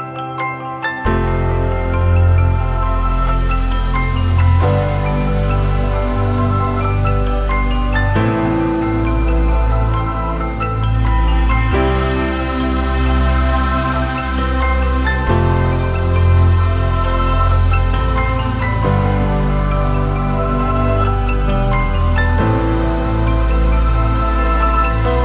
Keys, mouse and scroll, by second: 0.7-1.5 typing, 6.9-7.7 typing, 9.8 typing, 20.4-21.4 typing, 24.9-25.2 typing.